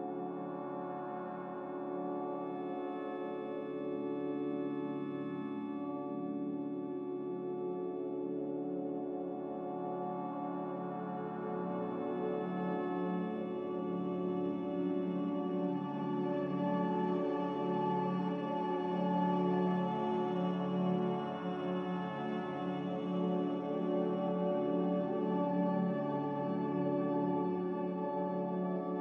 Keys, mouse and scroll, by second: 25.0 x.